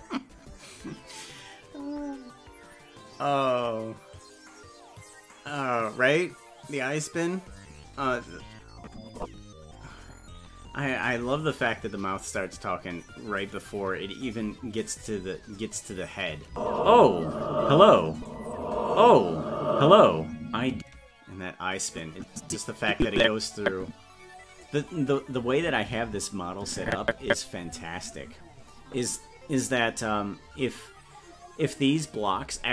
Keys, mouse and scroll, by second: 8.3-10.3 drag, 16.5 space, 18.2 click, 20.7 space, 21.9-24.6 drag, 25.6-26.9 Left.